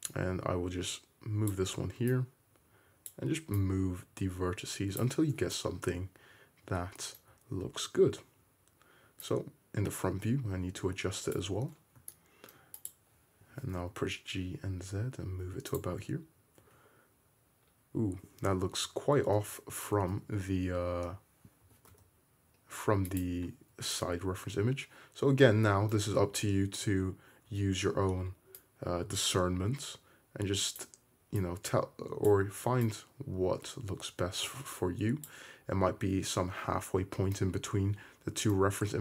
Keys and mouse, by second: 4.2-13.0 drag, 13.0-18.5 middle drag, 13.6 g, 16.8 `, 18.7 ctrl+z, 19.0 ctrl+z, 19.6 ctrl+z, 20.0 middle click, 20.4 `, 21.8 g, 23.8 Tab, 24.7-28.8 middle drag, 26.4 `, 27.7 Tab, 29.6-35.5 drag, 38.8 Tab.